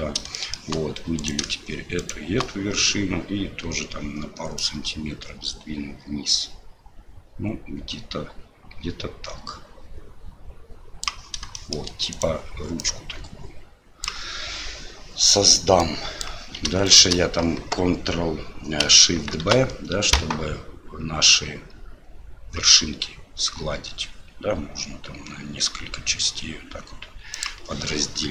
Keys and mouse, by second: 0.4 shift+middle click, 1.2 right click, 2.0 shift+right click, 4.6-11.0 drag, 11.5 shift+middle click, 12.1 right click, 12.8-14.1 drag, 15.9 click, 16.8 shift+right click, 19.3 ctrl+shift+b.